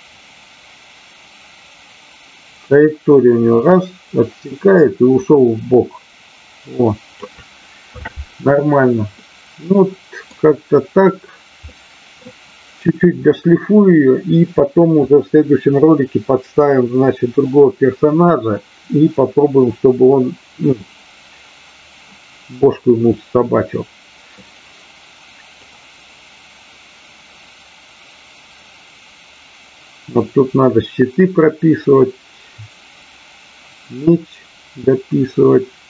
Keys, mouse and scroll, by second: 0.2-7.2 drag, 9.2-10.3 middle drag, 11.7 middle click, 23.3-24.3 middle drag, 25.6-35.8 drag.